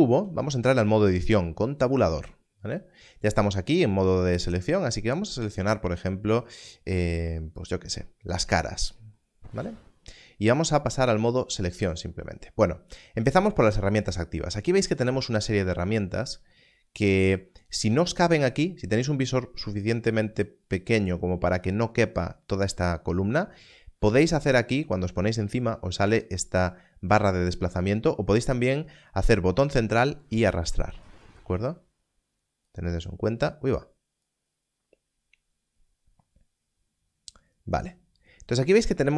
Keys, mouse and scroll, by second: 1.6 Tab, 5.4 click, 7.5 click, 21.6 click, 26.2 click, 32.6 click, 34.8 click.